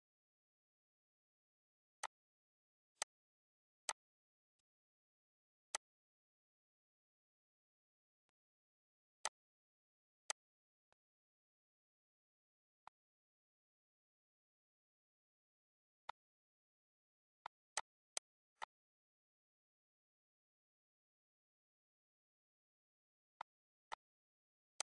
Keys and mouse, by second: 1.2 click, 1.8 click, 2.7 click, 3.4 click, 4.1 click, 5.2 click, 7.7 click, 8.7 click, 9.8 click, 10.5 click, 12.3 click, 15.7 click, 16.3 ctrl+s, 17.0 click, 18.2 click, 21.6 click, 23.0 click, 23.8 click, 24.8 click.